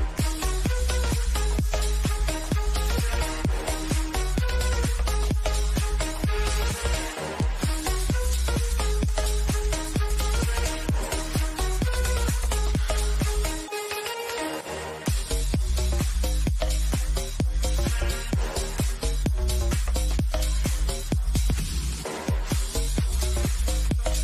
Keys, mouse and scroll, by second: 3.7 scroll down 1, 4.0-10.3 drag, 13.7 click, 21.1 click.